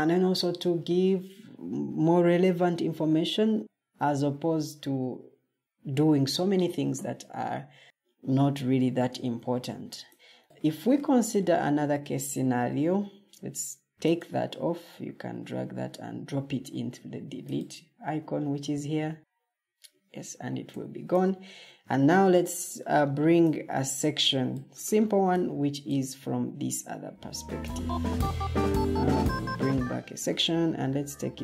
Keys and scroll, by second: 12.2 Escape, 20.5 o, 26.5 Escape.